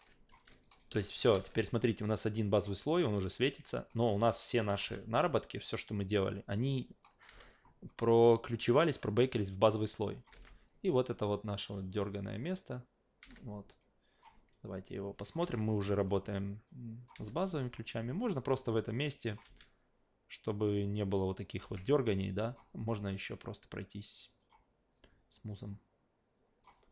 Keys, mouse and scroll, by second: 0.6 alt+right click, 0.9 alt+middle click, 3.1 click, 3.9 alt+middle click, 4.2 a, 4.6 click, 4.9 f, 5.6 click, 7.0 click, 7.3 f, 7.9 click, 9.9 click, 10.3 alt+v, 10.7 alt+middle click, 11.2 alt+click, 13.8-14.2 drag, 14.9 click, 15.4 f, 16.0 click, 16.7 click, 17.1 f, 17.7 click, 18.3-19.3 drag, 19.4 alt+v, 21.6 alt+v, 21.9-22.5 drag, 23.4-24.5 drag, 24.9-26.6 drag.